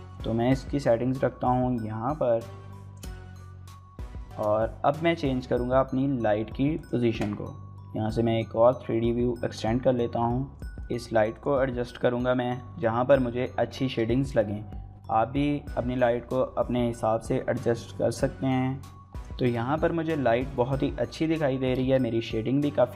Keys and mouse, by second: 21.6 ctrl+space.